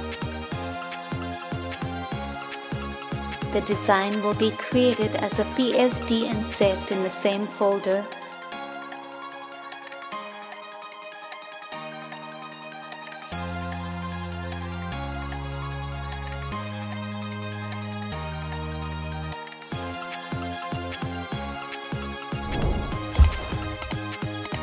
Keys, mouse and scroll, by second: 7.5 ctrl+=, 8.0 ctrl+=, 11.3 space, 11.8 space.